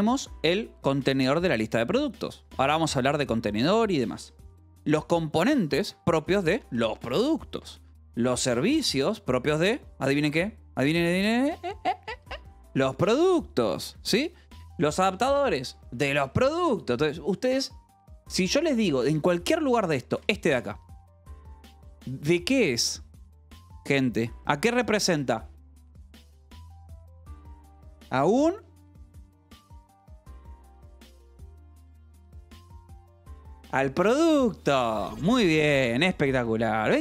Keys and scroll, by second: 2.4 Escape, 4.5-9.2 typing, 5.7 Escape, 9.6 Escape, 11.9-15.6 typing, 13.8 Escape, 15.5 Escape, 16.7 Escape, 16.9 j, 18.4-19.5 typing, 20.6 shift+v, 36.4 Escape.